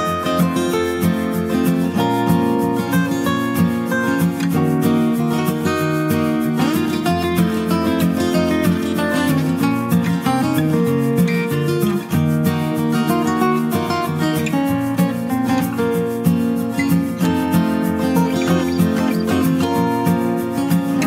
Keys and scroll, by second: 0.0 ctrl+Return, 8.6 ctrl+j, 20.7 ctrl+space.